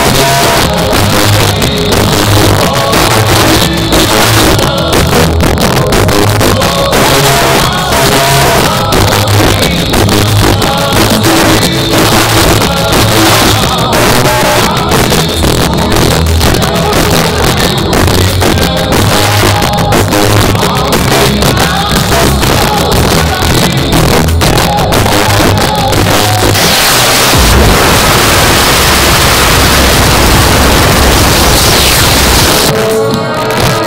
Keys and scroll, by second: 32.4 Page_Down.